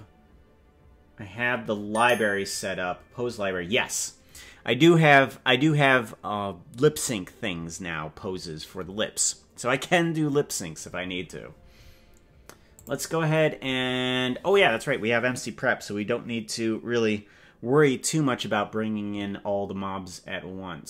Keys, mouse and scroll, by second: 2.4 click, 12.7 click.